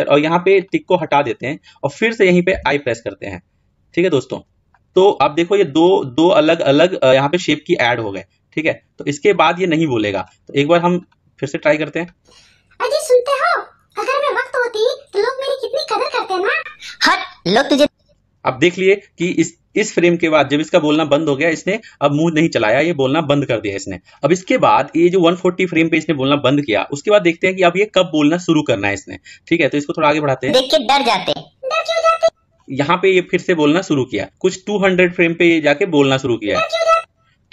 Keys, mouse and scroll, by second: 0.6 click, 2.5 typing, 4.9-10.3 drag, 11.0-14.5 drag, 17.7-24.4 drag, 30.3-37.5 drag.